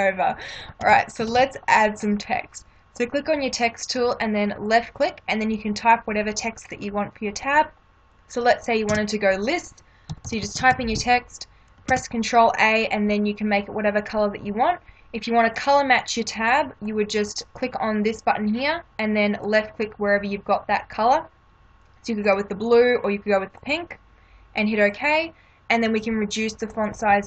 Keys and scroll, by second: 0.8 ctrl+=, 9.0 Caps_Lock, 9.8-10.7 typing, 12.9 ctrl+a.